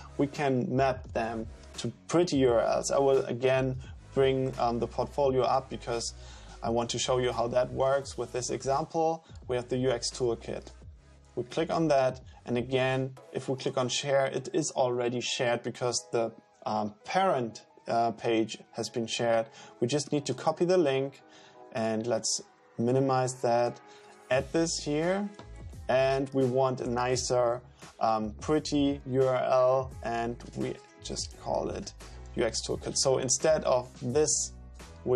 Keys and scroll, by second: 24.8 super+v, 30.2-32.3 typing.